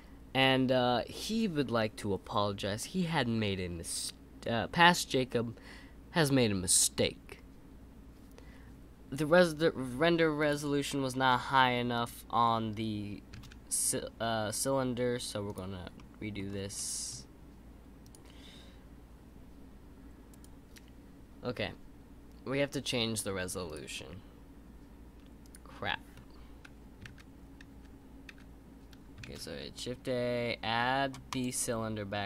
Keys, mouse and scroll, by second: 13.3 shift+a, 15.9-16.4 middle drag, 16.4-16.7 scroll down 2, 16.7-18.0 middle drag, 18.0-20.5 drag, 23.6 click, 25.4 click, 27.1 ctrl+z, 29.2 shift+a.